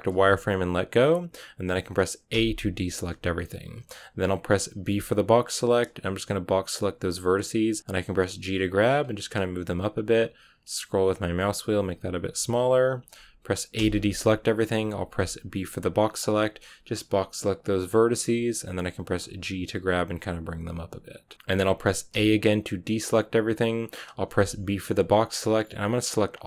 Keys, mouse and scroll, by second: 0.0 z, 2.2 a, 7.0 b, 8.1 g, 13.6 a, 17.7 b, 19.1 g, 21.3-22.0 scroll up 1, 22.0 a.